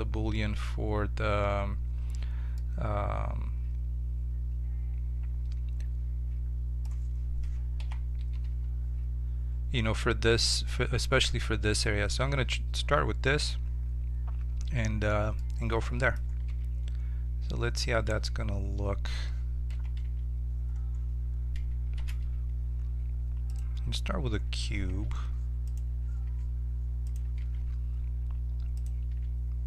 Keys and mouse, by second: 2.6-4.5 middle drag, 7.8 KP_7, 8.4 z, 15.4-16.9 middle drag, 16.5 z, 18.1 Tab, 19.7 KP_7, 22.0 shift+a, 24.9 g, 26.3 g, 27.4 s, 29.1 g.